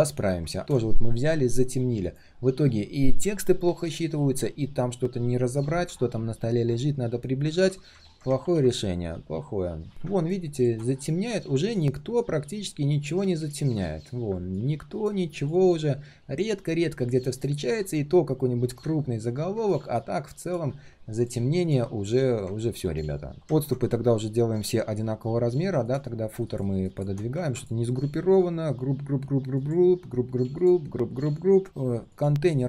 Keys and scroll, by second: 8.4 ctrl+s.